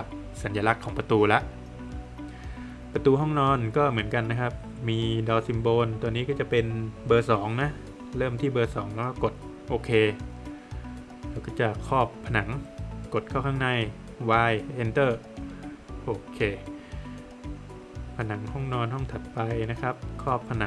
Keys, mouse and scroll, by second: 1.3 click, 5.4 click, 10.2 click, 14.7 Return, 15.4 Return, 16.8 space, 18.3 click.